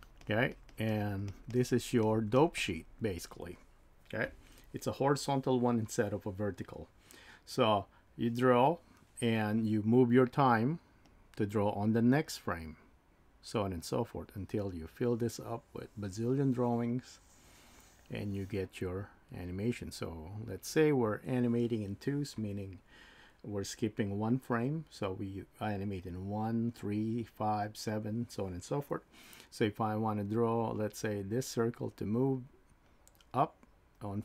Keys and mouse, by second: 0.9 click, 1.5 click, 2.0 click, 2.6 click.